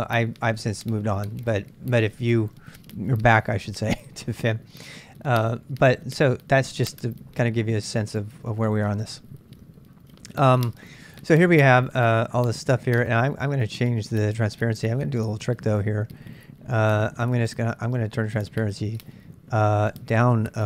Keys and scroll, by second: 11.4-12.1 typing.